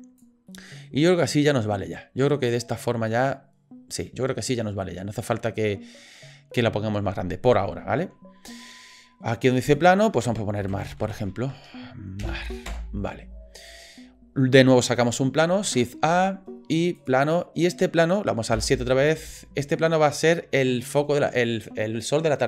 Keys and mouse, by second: 0.5-1.3 middle drag, 2.3-4.0 middle drag, 4.9 middle click, 9.6 middle click, 9.7 middle click, 9.7-13.1 drag, 13.6 middle click, 15.6 shift+a, 17.7 middle click, 18.5 KP_7, 19.8-20.8 drag.